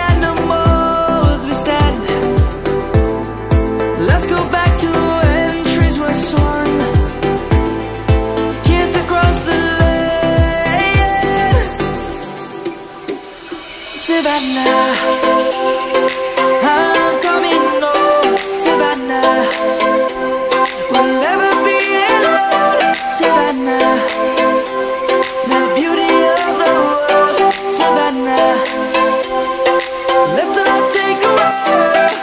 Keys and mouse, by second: 0.7 ctrl+x, 1.4 click, 3.4 click, 5.1 x, 5.7 click, 6.5 middle click, 7.3 middle click, 8.1 ctrl+z, 8.5 ctrl+z, 8.7 ctrl+z, 9.0 ctrl+z, 9.9 middle click, 13.6 click, 14.6 middle click, 16.8 Tab, 29.2 shift+m, 29.3 a, 29.8 space, 30.6 BackSpace.